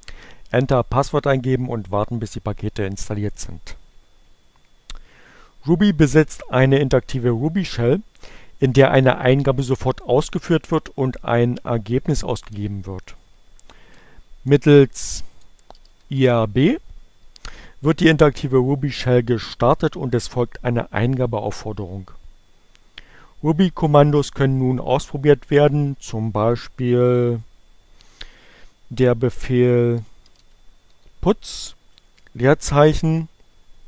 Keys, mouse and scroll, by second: 10.0 BackSpace, 14.9-15.9 typing, 17.0 Return, 27.8-28.8 typing, 30.5 s, 33.2 shift+2.